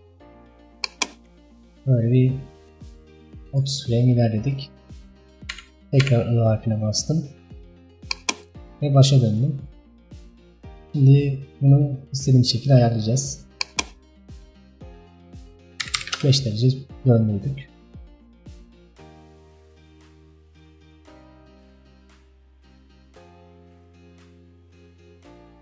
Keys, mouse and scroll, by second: 0.9-3.9 drag, 8.2-24.5 drag.